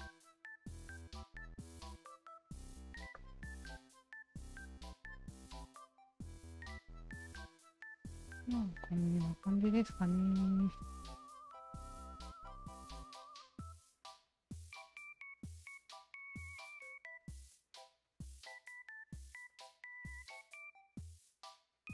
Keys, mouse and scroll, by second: 0.8-2.0 shift+drag, 2.5 ctrl+z, 3.2 click, 3.6 alt+right click, 3.9-8.1 alt+drag, 8.5 alt+right click, 10.3 alt+click, 11.4 shift+click, 12.3 shift+click, 13.5 ctrl+z, 14.3 click, 14.8-16.8 alt+drag, 17.5 alt+click, 18.5 alt+shift+click, 19.5 alt+click, 20.0 alt+right click, 20.2 alt+click, 21.3 alt+click.